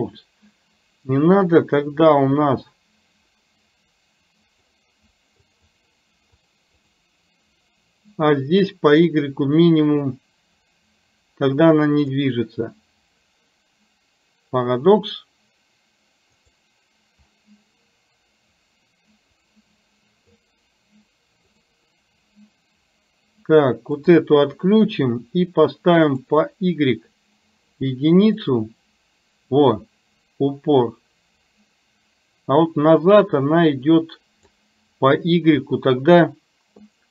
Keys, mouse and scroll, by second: 4.8 click, 5.4 click, 10.2-12.2 drag, 16.4 click, 19.7 click, 21.5 click, 24.0 click, 26.2 click, 28.5-34.5 drag, 36.9 click.